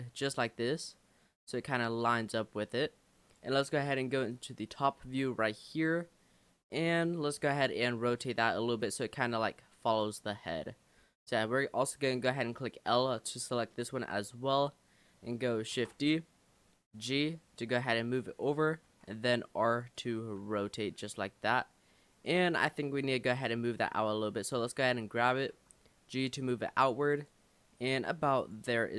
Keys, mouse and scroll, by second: 0.6-2.4 middle drag, 2.4 click, 4.3 click, 5.1-7.4 shift+middle drag, 7.4 r, 8.7 g, 11.0 l, 14.0-15.7 shift+middle drag, 15.7 shift+d, 16.9 g, 19.0 r, 20.4 g, 23.2 l, 23.6 l, 25.5 g, 28.4 click.